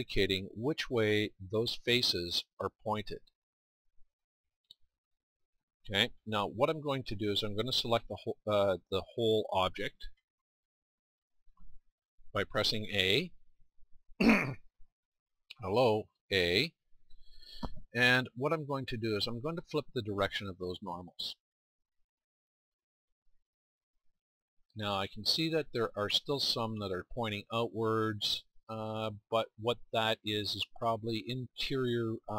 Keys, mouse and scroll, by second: 3.2 middle click, 5.9 middle click, 10.2-13.3 middle drag, 13.3 a, 16.0 a, 21.9 middle click.